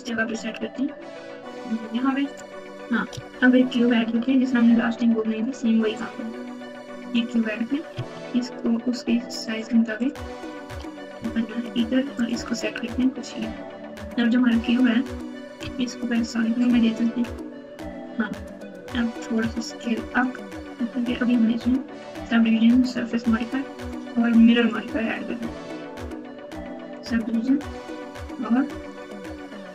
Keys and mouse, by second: 4.0 shift+a, 7.9 s, 9.9 click, 10.6 g, 14.2 click, 15.6 z, 19.3 s, 22.0 click, 22.9-24.7 drag, 27.7 click, 28.8-29.7 drag.